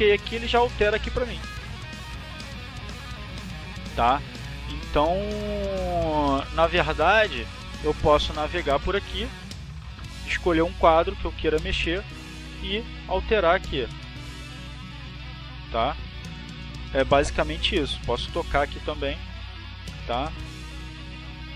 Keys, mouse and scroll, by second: 2.0-6.0 drag, 8.0 click, 8.6 click, 9.2 click, 9.8 click, 10.5 click, 11.6 click, 14.0 click, 14.6 click, 15.3 click, 18.0 click, 20.4 click.